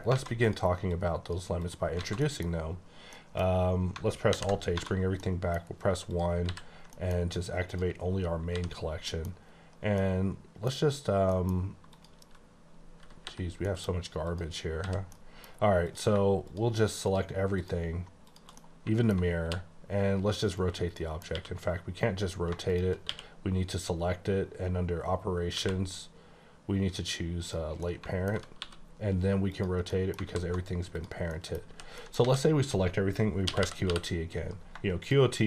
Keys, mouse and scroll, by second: 0.1 alt+a, 0.4 click, 0.9 click, 1.6 click, 1.9 scroll down 4, 2.0 a, 2.2 middle click, 3.1 middle click, 4.5 h, 4.8 1, 5.2 middle click, 5.6 scroll down 1, 6.0 click, 6.5 h, 6.8 middle click, 7.7 click, 8.4 h, 9.0 middle click, 9.5-9.9 scroll up 1, 9.9 middle click, 11.0 scroll up 2, 11.2 middle click, 11.8 click, 13.1 h, 13.4 scroll down 2, 13.6 middle click, 14.2 click, 14.7 h, 15.0 middle click, 15.8 click, 17.6 shift+click, 18.3 shift+click, 18.6 middle click, 20.6 right click, 21.0 middle click, 21.3 q, 22.7 shift+click, 23.1 q, 25.5 q, 27.4 click, 27.8 middle click, 28.6 r, 29.5 click, 29.9 middle click, 30.1 alt+scroll down 1, 30.3 alt+a, 30.9 click, 31.3 middle click, 31.7 h, 31.9 middle click, 32.2 a, 33.4-33.9 typing, 34.9 click.